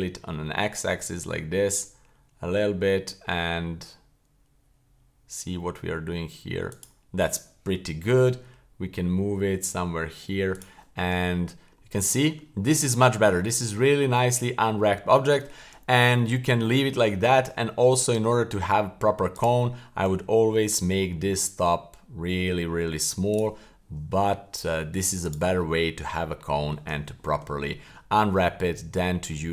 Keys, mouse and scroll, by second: 8.1 g, 11.0 Tab, 11.6-12.0 scroll down 2, 12.0-12.3 middle drag, 12.6 middle click, 13.1 middle click, 13.5 middle click, 14.0 middle click, 14.4 scroll up 2, 14.9-15.4 scroll down 1, 16.2 middle click, 16.8 middle click, 17.3 scroll up 1, 17.9 Tab, 19.3 right click, 23.7-24.1 middle drag, 24.3 Tab, 24.5 Tab, 25.2 right click, 25.5-25.9 scroll down 2, 25.9-26.7 middle drag, 27.2 shift+middle click, 27.5-27.9 scroll up 2, 27.9 shift+middle click, 28.3-28.7 scroll down 2, 28.7-29.1 middle drag, 29.2-29.5 scroll down 2.